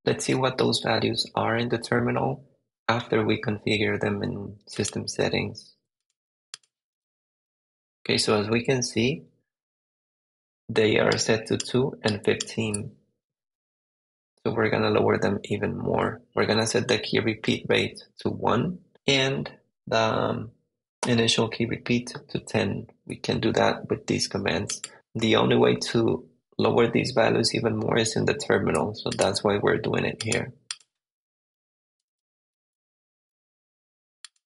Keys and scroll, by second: 6.9 super+v, 7.3 Return, 12.5 super+Tab, 31.6 q, 32.0 super+v, 32.4 Return, 33.1 super+Tab.